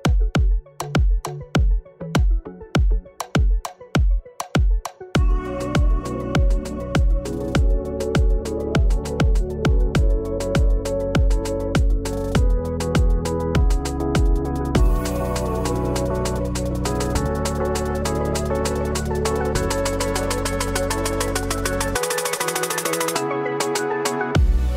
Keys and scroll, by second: 0.4 KP_1, 0.7 Tab, 2.5 Tab, 7.1 KP_Decimal, 7.2 KP_5, 7.2 Return, 7.8 KP_Decimal, 8.0 Return.